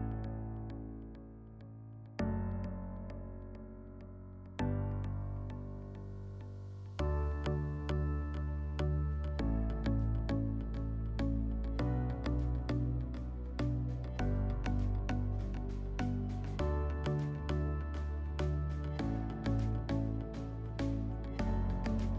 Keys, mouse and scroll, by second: 0.3 click, 1.6 ctrl+click, 2.6 click, 4.2-5.2 scroll, 5.2 click, 6.0 ctrl+click, 7.0 click, 8.2 click, 10.0 click, 10.9 ctrl+click, 11.4 ctrl+click, 12.2 ctrl+click, 13.5 click, 16.6 click, 17.8 ctrl+click, 18.7 click.